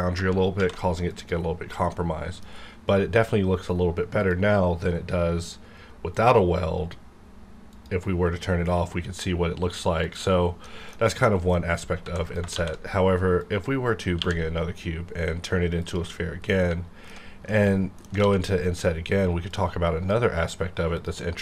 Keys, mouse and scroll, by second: 0.8 alt+v, 1.1 click, 1.9-4.8 middle drag, 4.2 click, 4.8-6.1 scroll down 1, 6.1 click, 10.0 click, 10.6 middle click, 10.9-11.2 scroll down 1, 11.2 middle click, 11.6 scroll up 1, 12.0 x, 12.2 click, 12.5 shift+a, 13.6 click, 14.0 scroll down 1, 14.2 q, 15.8 click, 16.5-18.2 middle drag, 18.2 alt+d, 19.5-21.0 drag.